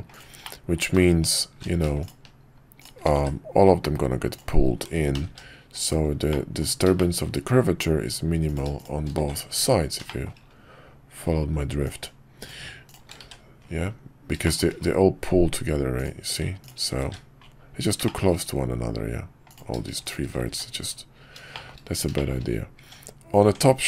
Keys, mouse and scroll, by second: 0.4 middle click, 1.3 shift+click, 3.2 shift+1, 4.3 click, 5.2 g, 6.4 middle click, 7.0 shift+middle click, 8.5 click, 8.8 shift+click, 9.2 shift+1, 10.1 shift+middle click, 11.9 click, 12.4 shift+click, 12.9 shift+click, 14.5 shift+middle click, 15.9 click, 18.0 shift+middle click, 19.5 click, 20.5 shift+1, 21.5 shift+middle click, 22.1 shift+middle click, 22.8 Tab.